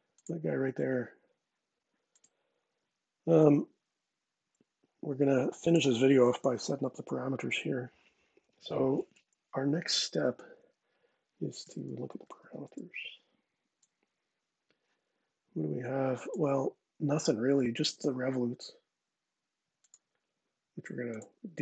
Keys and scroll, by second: 11.1-12.9 typing, 13.5 Return.